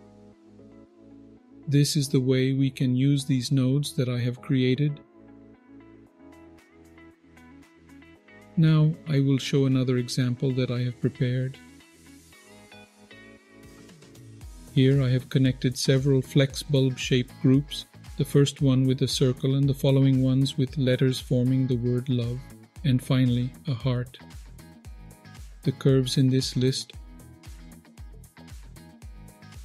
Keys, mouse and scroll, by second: 7.5-8.2 scroll down 1, 8.2-8.9 middle drag, 8.2-8.5 scroll down 2, 9.1-9.8 scroll down 2, 10.0 alt+click, 11.0-16.4 middle drag, 16.4-17.2 scroll up 3, 20.1-20.5 scroll down 2, 20.5-21.4 middle drag, 25.5-27.3 drag, 28.7 click, 29.5 click.